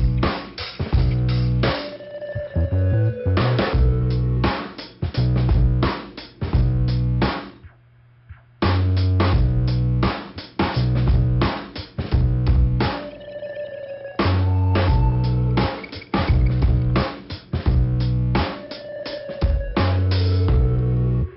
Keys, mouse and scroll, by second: 0.2 right click, 0.7 click, 0.8 scroll up 1, 0.9 click, 2.2 right click, 3.7 click, 4.7 scroll down 2, 5.5 click, 9.8 click, 11.0 click, 12.2 click, 13.2 click, 14.2 click, 14.8 click, 15.2 click, 15.9 click, 16.8 click, 18.1 right click, 18.9 click, 19.6 scroll down 2.